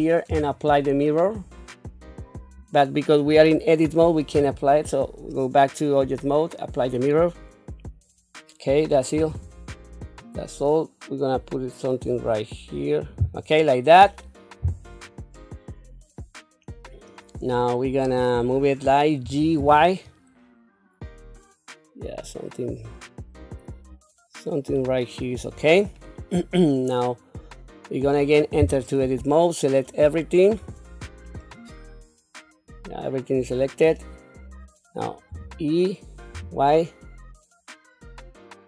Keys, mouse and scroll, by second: 1.3-2.5 drag, 4.3 Tab, 6.0 click, 9.1 r, 14.6 q, 15.3-16.9 middle drag, 19.2 g, 26.0-28.0 middle drag, 28.6 Tab, 30.6 a, 31.4-33.8 middle drag, 35.3 e.